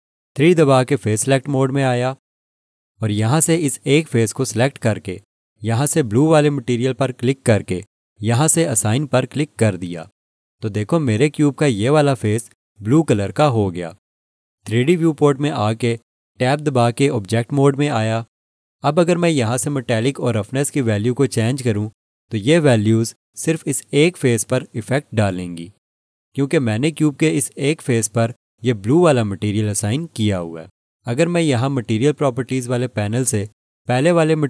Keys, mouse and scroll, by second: 1.2 3, 4.5 click, 17.4 Tab, 20.9 click, 26.0 Left, 26.1 alt+click.